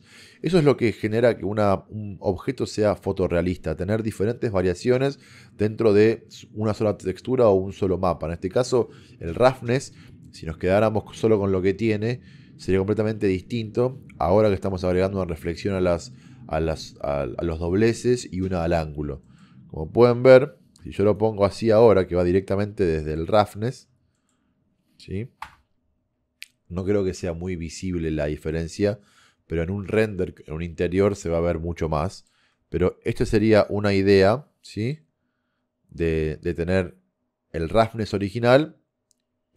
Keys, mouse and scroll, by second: 10.3 middle click, 12.6 middle click, 22.0 middle click, 25.5 KP_0.